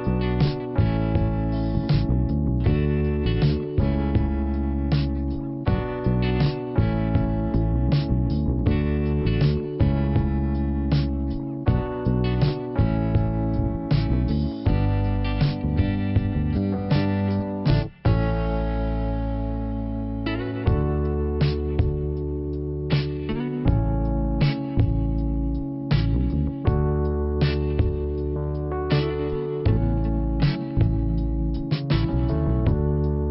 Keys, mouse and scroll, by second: 1.3 scroll up 1, 1.7 click, 2.7 click, 6.1 click, 7.8 click, 10.8 middle click, 11.5-12.6 scroll up 1, 12.7 click, 13.5 click, 17.8 click, 23.3 click, 24.1 double click, 24.7 scroll down 2, 27.0 middle click, 28.4 scroll up 2, 29.0 click, 31.4 click, 33.2 click.